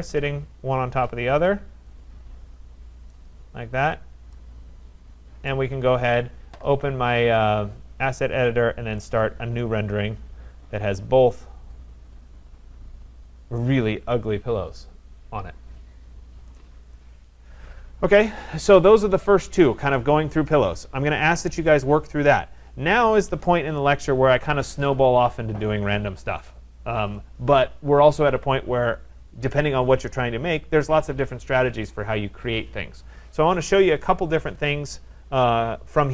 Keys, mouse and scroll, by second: 3.1 right click, 3.7 middle click, 5.5 right click, 7.5 click, 9.2 click.